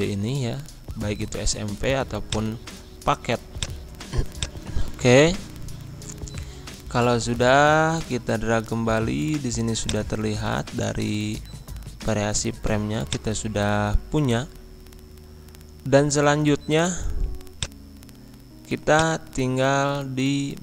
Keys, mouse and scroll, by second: 1.7-2.2 scroll up 1, 2.2 click, 2.6 scroll up 1, 3.6 click, 4.8-5.7 scroll down 1, 5.7 Right, 9.8 click, 10.3-11.2 scroll down 1, 13.1 click, 14.3 F4, 15.7 Pause.